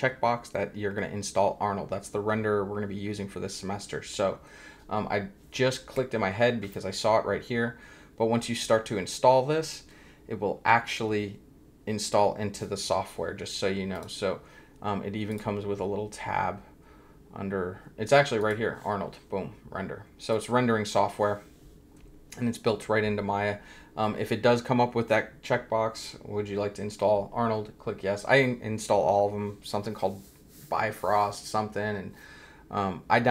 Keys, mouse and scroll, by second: 13.9 click, 15.3 click, 18.4 click, 20.3 click.